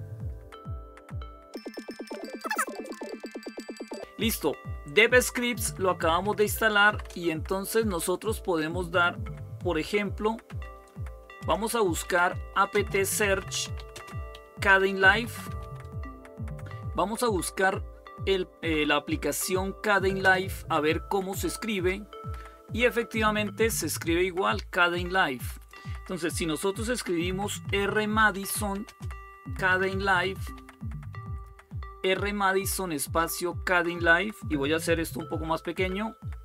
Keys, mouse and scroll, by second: 5.8-7.1 typing, 8.6 typing, 10.2 typing, 11.6-16.1 typing, 20.0 Return, 25.3 click, 26.6-30.9 typing, 35.1 ctrl+-, 35.5 ctrl+-.